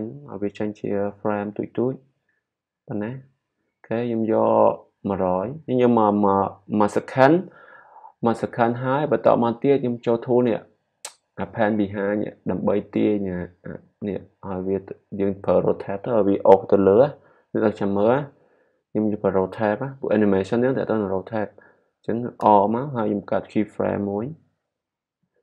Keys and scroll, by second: 22.4 r.